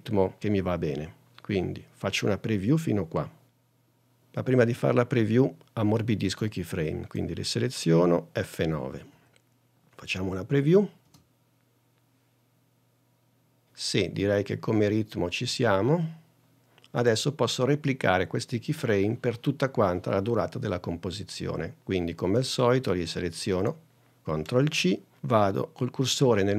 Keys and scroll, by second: 3.7 n, 9.3 F9, 11.2 space, 24.8 super+c.